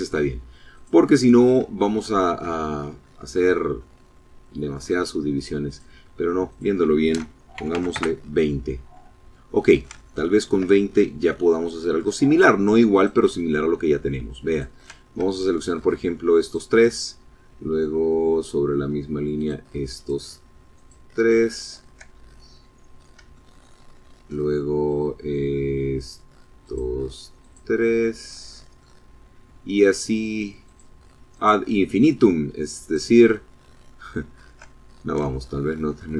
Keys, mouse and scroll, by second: 0.8 shift+middle click, 1.7-2.2 shift+scroll up 5, 2.4-2.8 scroll down 2, 2.8-3.9 drag, 4.7 click, 5.6 click, 6.6 KP_2, 6.8 KP_0, 7.0 KP_Enter, 8.5 middle click, 9.1 shift+middle click, 9.9 shift+scroll up 1, 10.2 shift+middle click, 11.9 click, 13.5 shift+click, 14.4 shift+middle click, 15.5 shift+click, 18.4 shift+click, 19.0 shift+click, 19.8 shift+click, 20.3 shift+middle click, 22.0 scroll down 1, 22.4-23.5 shift+drag, 25.0 shift+click, 25.7 shift+click, 26.5 shift+click, 27.1 shift+click, 29.7 shift+click, 30.4 shift+click, 31.9 shift+click, 32.4-33.6 shift+middle drag, 33.9 shift+scroll up 2, 34.4-35.5 shift+middle drag.